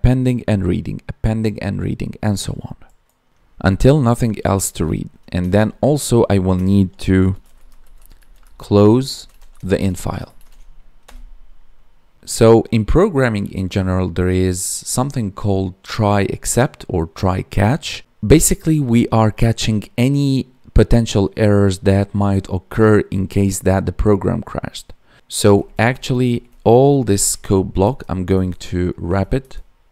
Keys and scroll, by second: 10.3 ctrl+s, 27.7 Tab, 28.3 Up, 29.1 Down, 29.3 Tab.